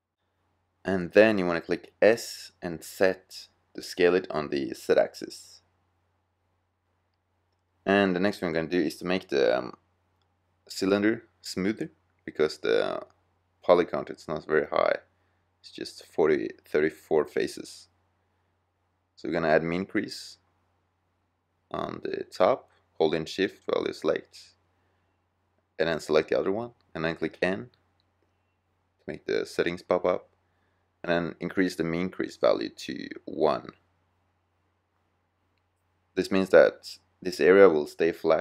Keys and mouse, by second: 1.3-1.8 drag, 1.8 s, 7.0-8.1 middle drag, 9.3 middle click, 12.6-13.3 middle drag, 20.5-25.3 middle drag, 26.7 n, 28.1-29.8 drag, 35.0-37.2 drag.